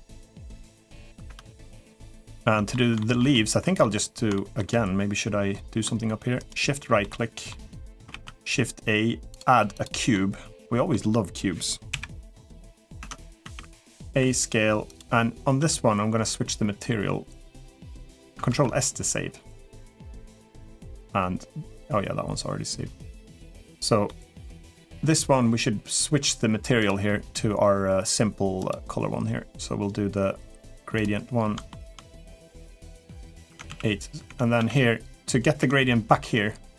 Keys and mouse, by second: 0.7 middle click, 1.1 Tab, 1.4 click, 1.7 middle drag, 2.3 middle click, 2.8 shift+middle drag, 3.1-3.6 middle drag, 4.1 shift+middle drag, 6.2 shift+right click, 6.8-7.3 shift+middle drag, 7.4-7.7 middle drag, 8.2 shift+a, 9.9-10.7 middle drag, 11.7 KP_1, 12.8 Tab, 13.2 a, 13.9 s, 15.4 Tab, 18.3 ctrl+s, 23.8-24.3 middle drag, 26.6 click, 28.5-30.8 drag, 31.5 shift+middle click, 32.9 Tab, 33.3 Tab, 33.5 a, 34.1 Tab, 34.4 a, 35.4 Tab.